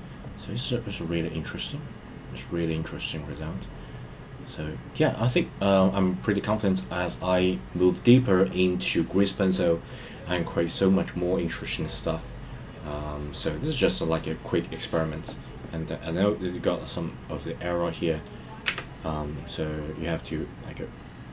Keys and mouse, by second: 3.9-6.8 middle drag, 7.1 middle click, 16.9-18.2 middle drag, 19.3-21.3 middle drag.